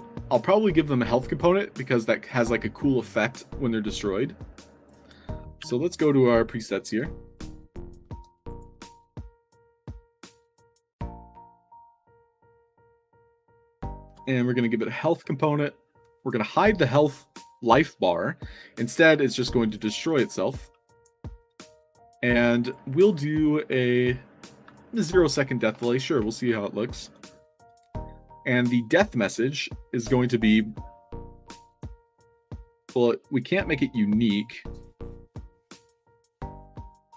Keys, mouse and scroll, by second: 6.4 click, 7.3 click, 8.2 i, 8.4 click, 8.8 f, 9.2 click, 9.4 f, 9.9 alt+drag, 10.8 scroll up 2, 11.5 click, 12.9 click, 14.0 click, 14.7 middle click, 15.4 click, 16.1 click, 20.0 click, 22.5 click, 27.1 click, 27.6 click, 30.0 click, 31.6 click.